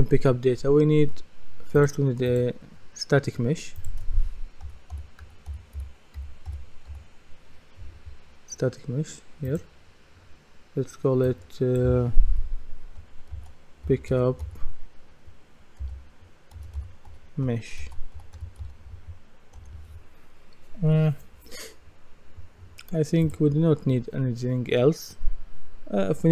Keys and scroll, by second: 4.7-6.9 typing, 13.3-19.1 typing, 19.6 Return.